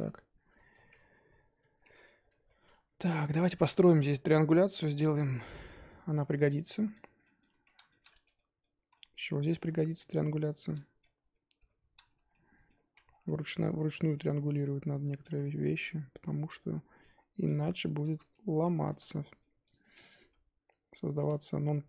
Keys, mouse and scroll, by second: 0.0-0.7 middle drag, 0.7-1.8 scroll up 1, 1.8 1, 1.9-2.2 scroll up 4, 2.2-3.0 middle drag, 3.0 click, 3.1 shift+middle drag, 3.4-3.8 scroll up 2, 3.8 shift+click, 4.5 j, 4.8 scroll down 4, 5.1-5.9 middle drag, 5.9 scroll up 3, 6.1 Tab, 6.3-7.0 middle drag, 7.0 click, 7.2-8.1 middle drag, 8.1 Tab, 8.3-8.8 middle drag, 8.8 z, 8.9-9.3 middle drag, 9.3-9.9 scroll up 1, 9.9 click, 10.4 shift+click, 11.5 j, 11.9 scroll down 1, 12.1 Tab, 12.3-12.9 middle drag, 12.9 z, 13.0 scroll down 3, 13.2-13.9 middle drag, 13.9 Tab, 14.1-15.3 middle drag, 15.3 scroll up 4, 15.6-17.5 middle drag, 17.5 click, 17.8 shift+click, 18.6 j, 18.8-19.7 middle drag, 19.7 click, 19.8-20.2 middle drag, 20.2 g.